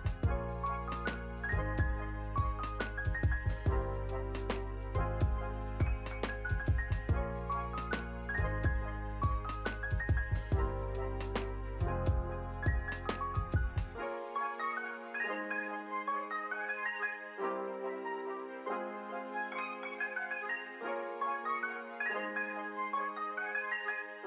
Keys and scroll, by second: 4.4 space, 4.6 ctrl+s, 5.2 ctrl+a, 6.8 v, 10.2 space, 10.9 p, 14.7-17.7 typing, 19.9 2, 20.8 shift+0, 21.2 ctrl+a, 21.7 ctrl+c, 21.9 Return, 22.6 space.